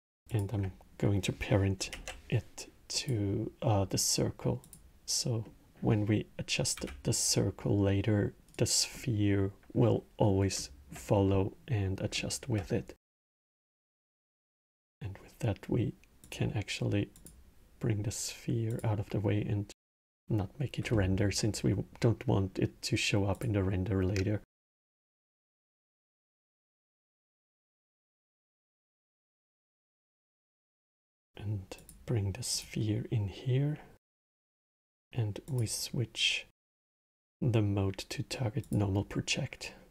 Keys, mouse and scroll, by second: 0.0 ctrl+click, 0.7-1.6 middle drag, 1.6 ctrl+p, 4.3 click, 5.1-6.5 middle drag, 6.5 s, 10.3-14.5 alt+middle drag, 14.5 click, 16.0 click, 17.5-18.7 drag, 19.7 click, 23.0 click, 24.2-29.3 middle drag, 29.7 click, 31.5-34.7 drag, 35.2-38.3 drag.